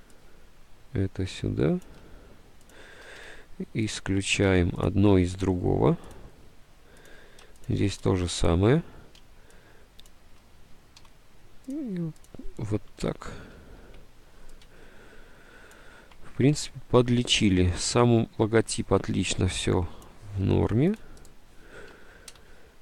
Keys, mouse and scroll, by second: 3.4 s, 11.1 c, 13.1 click, 13.9 Right, 22.5 d.